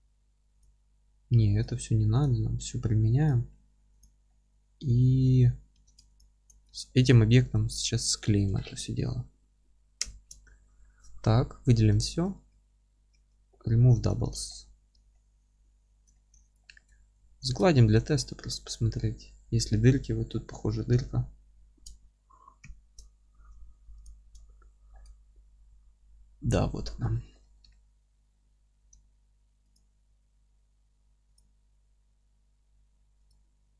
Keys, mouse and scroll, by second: 4.0 click, 4.3-6.1 middle drag, 4.6 Tab, 6.1 ctrl+click, 6.7 alt+q, 7.0-13.7 alt+middle drag, 9.9 ctrl+j, 10.5 Tab, 11.3 a, 13.1 w, 13.7 scroll up 1, 13.9 Tab, 14.5 alt+middle click, 14.7 alt+q, 15.1 alt+middle click, 16.3 alt+q, 16.6 alt+middle click, 16.9 scroll up 1, 17.2 ctrl+2, 17.7 alt+middle click, 20.0-20.3 scroll up 1, 20.3 alt+middle click, 21.3-22.6 scroll up 1, 22.6 ctrl+0, 23.3 Tab, 24.0 click, 24.4 alt+middle click, 25.3 g, 27.4 middle click, 28.7 alt+c.